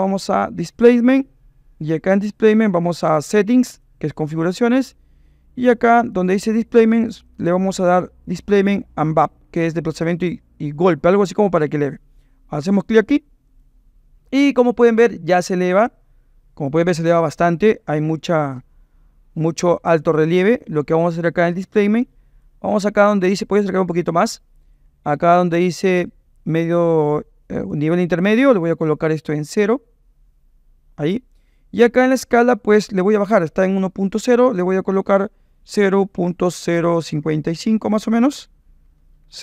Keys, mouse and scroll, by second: 3.7 click, 7.4-13.8 drag, 22.0 click, 24.8 middle click, 24.9 click, 25.1 right click, 27.2 click, 29.1-31.0 drag, 34.4-39.4 drag, 37.2 KP_5, 39.1 BackSpace.